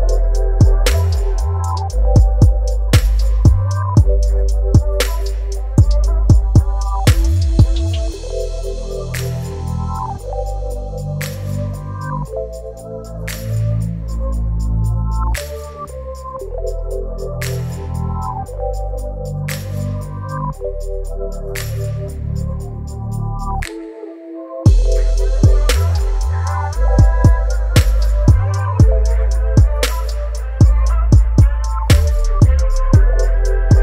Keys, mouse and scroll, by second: 0.2 shift+d, 1.6 click, 2.6-3.6 scroll down 4, 3.6-5.2 drag, 5.2-5.8 middle drag, 5.8-6.2 scroll up 1, 6.2 s, 7.3 right click, 7.7-9.1 drag, 9.1 right click, 9.5 x, 9.9 right click, 10.2-11.0 middle drag, 11.0-12.2 drag, 12.2 s, 13.5 w, 15.9-16.5 shift+middle drag, 16.5 g, 17.8-18.3 middle drag, 18.3 a, 18.6 scroll down 4, 18.7 middle click, 18.8 right click, 19.1 Tab, 19.5 right click, 20.2 i, 21.2 e, 22.8 Tab, 23.0 scroll down 5, 23.3-23.9 middle drag, 23.9-24.2 scroll up 3, 24.2 s, 24.6 ctrl+KP_Add, 25.6 s, 27.0 middle click, 27.4-27.8 scroll down 2, 27.8 g, 28.4 Tab, 28.6 scroll down 1, 28.8-29.5 middle drag, 29.5 scroll down 5, 29.8 a, 29.8 a, 30.3 scroll down 4, 30.4-31.9 middle drag, 31.9 right click, 32.0 KP_1, 32.3 KP_5, 32.8-33.2 scroll up 3, 33.2 Tab, 33.5 shift+middle click, 33.7-33.8 scroll up 3.